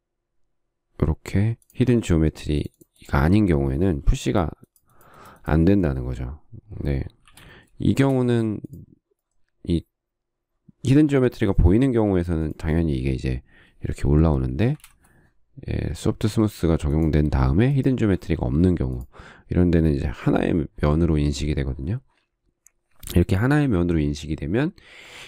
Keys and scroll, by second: 4.4 p, 7.6 shift+c, 8.3 space, 12.4 p, 14.9 space, 15.1 Escape.